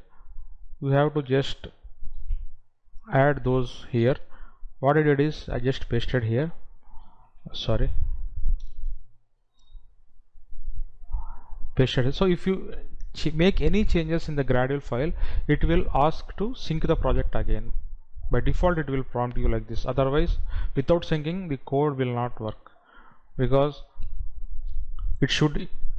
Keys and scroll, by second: 2.6 ctrl+v, 5.6 ctrl+z, 8.2 ctrl+z.